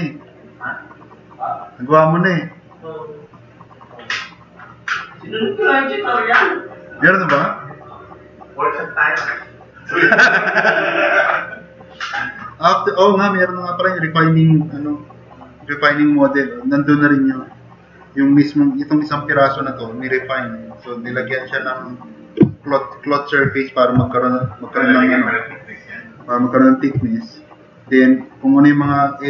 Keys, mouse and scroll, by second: 27.6 drag.